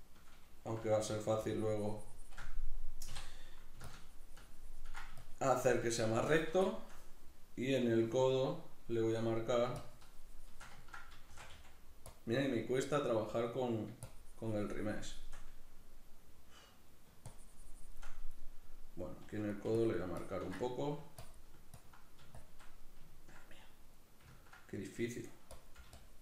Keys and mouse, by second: 0.0 shift+middle click, 0.8 f, 1.5-6.7 shift+drag, 6.7-9.8 shift+middle drag, 9.8-10.8 shift+drag, 10.8 ctrl+middle click, 11.3 shift+c, 12.2 click, 12.3-14.1 middle drag, 14.1-15.4 shift+drag, 15.4-17.3 middle drag, 17.3 shift+click, 18.1-19.2 middle drag, 19.2 f, 19.8 ctrl+click, 20.6 middle click, 21.2-22.8 ctrl+drag, 22.8 middle click, 25.5 click.